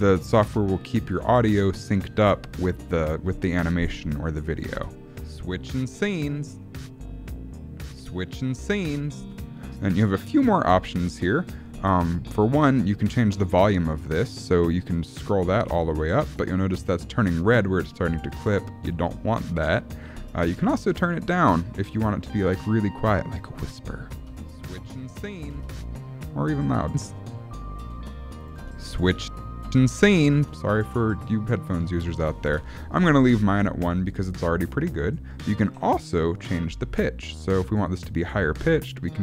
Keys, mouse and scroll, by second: 4.5 click, 4.7 space, 9.2 space, 9.6 click, 14.7 click, 19.6 click, 24.1 space, 25.5 space, 25.7 click, 26.8 space, 27.9-30.4 typing, 28.4 click, 31.9 click, 38.2 click.